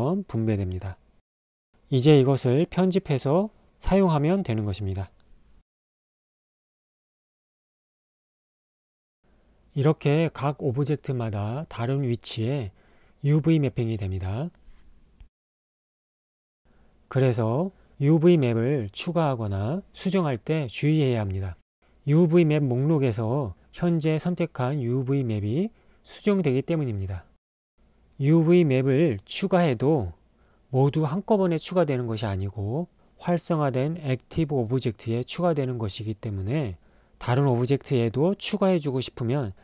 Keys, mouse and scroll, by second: 2.8 Tab, 8.3 click, 9.3 Tab, 12.0 Tab, 12.2 click, 12.5 Tab, 14.8 Tab, 15.6 click, 16.3 Tab, 18.5 Tab, 18.9 click, 19.6 Tab, 21.0 Tab, 28.0 a, 28.8 Tab, 32.1 click, 35.4 Tab, 36.3 click, 38.5 click, 38.9 Tab.